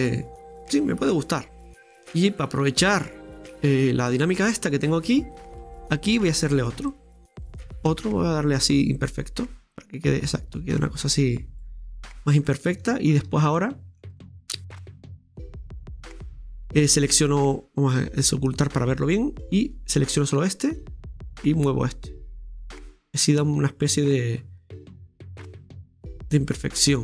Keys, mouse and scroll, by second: 1.4 scroll up 1, 1.5-2.0 scroll down 6, 2.4-3.9 middle drag, 3.9-5.0 scroll up 9, 5.0 Tab, 6.7 middle click, 7.2 ctrl+click, 8.0 middle click, 8.6 click, 11.9 click, 12.0-12.5 scroll up 1, 12.5 ctrl+middle click, 13.1-13.4 scroll down 2, 13.4-16.5 ctrl+shift+middle drag, 14.4-15.1 scroll up 1, 15.1 KP_Decimal, 15.7-16.3 scroll up 2, 16.3 scroll down 2, 18.1-19.6 drag, 19.7 right click, 22.3 right click, 23.1-24.9 drag, 25.0 right click, 25.6-27.0 drag.